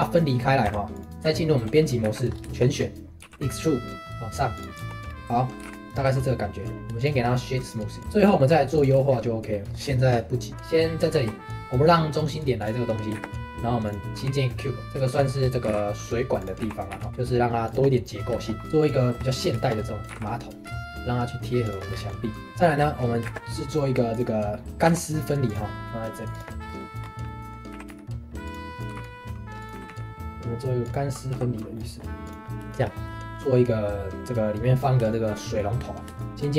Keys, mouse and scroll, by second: 0.6 Tab, 0.9 click, 1.1 shift+middle click, 1.2 Tab, 2.0 a, 2.3 scroll up 3, 2.5 shift+middle click, 2.8-3.2 scroll down 1, 3.2 e, 4.8 Tab, 5.0-5.6 scroll down 2, 5.6 g, 6.7 right drag, 7.0 shift+click, 7.3 right click, 8.0 click, 8.0-8.7 scroll up 3, 8.2 middle drag, 8.7 click, 9.0-11.1 shift+middle drag, 11.1 shift+s, 13.1 shift+a, 14.2 s, 14.8 shift+middle click, 15.4 scroll up 1, 15.6 g, 17.9 middle click, 18.8 shift+click, 19.0-19.4 shift+middle drag, 19.4 scroll up 2, 19.6-20.1 shift+middle drag, 20.1 g, 21.9 scroll down 2, 22.1-22.6 middle drag, 22.6 scroll down 2, 22.8-23.3 shift+middle drag, 23.3 shift+a, 24.8 s, 25.8 g, 26.7-27.0 middle drag, 27.0 scroll down 1, 27.2 middle click, 27.7 s, 28.9 g, 31.7 middle click, 32.2 click, 32.4 shift+middle click, 33.3 shift+a, 35.1-35.8 shift+middle drag, 35.8-36.2 scroll up 1, 36.2 shift+middle click.